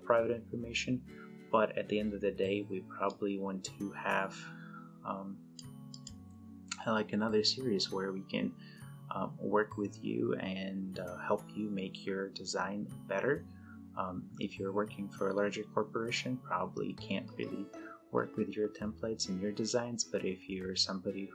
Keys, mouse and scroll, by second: 3.1-5.8 drag.